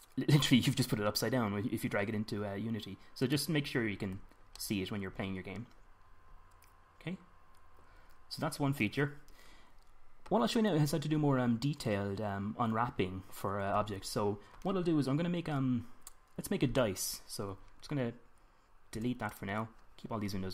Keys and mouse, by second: 5.4-5.9 middle drag, 11.7 middle click, 19.5 x.